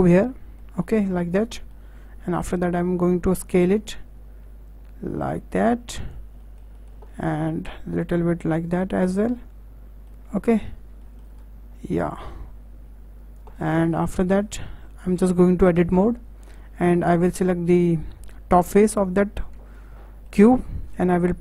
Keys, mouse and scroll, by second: 0.1 scroll down 2, 0.3-2.4 middle drag, 2.4-3.6 drag, 6.4-7.6 middle drag, 7.6 s, 9.0-9.3 scroll down 4, 9.3 middle click, 10.2-11.0 scroll up 11, 11.0-11.3 shift+middle drag, 11.3-12.1 scroll up 2, 12.1 click, 13.6 scroll down 2, 13.7-15.7 middle drag, 15.7 Tab, 18.1 3, 18.6 click, 19.7-21.4 shift+middle drag.